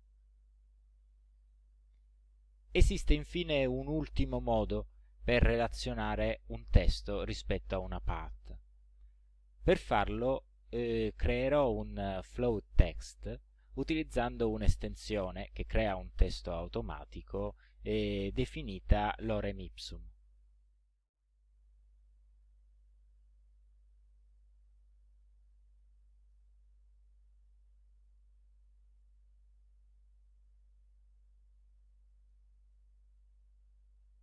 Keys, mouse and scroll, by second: 14.0 click, 20.4 click, 23.1 click, 24.1 click, 25.5 click, 26.3 click, 26.9 ctrl+scroll down 2, 28.1 ctrl+click, 29.0 click, 30.7 ctrl+scroll down 2, 31.7 ctrl+click, 33.4-34.2 drag.